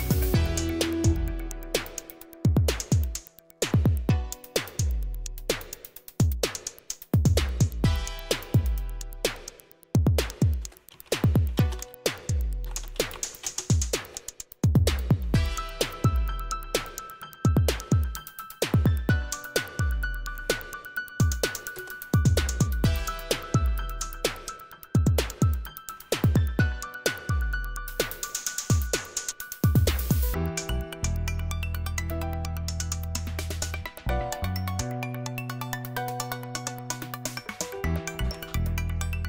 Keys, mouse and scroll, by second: 1.7-2.8 drag, 9.8 c, 10.8-20.0 typing, 20.3 Tab, 21.6 Return, 22.3-26.1 typing, 27.4-28.1 typing, 34.2 click, 35.5 click, 36.7-38.1 typing.